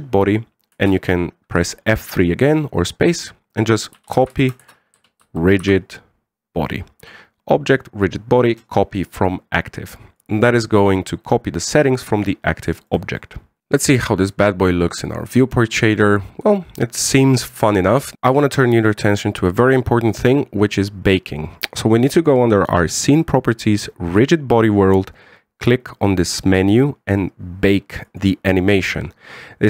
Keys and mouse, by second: 0.3-0.7 middle drag, 1.5 space, 13.5 shift+middle click, 14.9 click, 15.5-17.9 middle drag, 23.7 click, 28.8-29.6 drag.